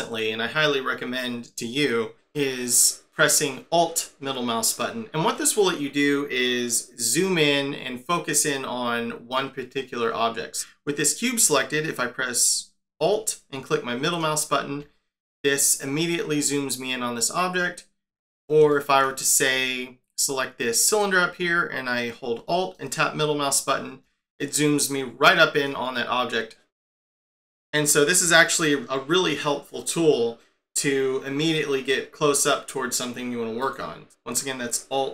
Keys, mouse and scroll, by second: 14.0 alt+middle click, 17.5 scroll down 5, 18.7 shift+middle click, 20.2 click, 22.7 alt+middle click, 25.9 scroll down 2, 26.8 middle click, 33.6 click.